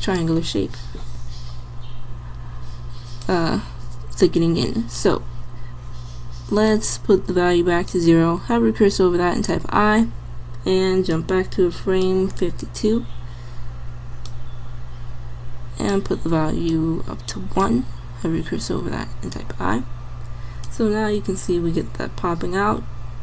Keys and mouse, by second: 9.5 i, 18.3 i, 20.7-21.8 drag.